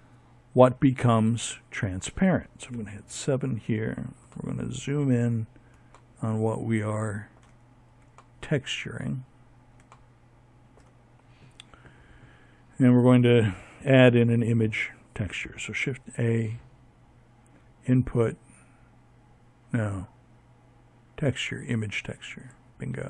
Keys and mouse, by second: 0.7 KP_7.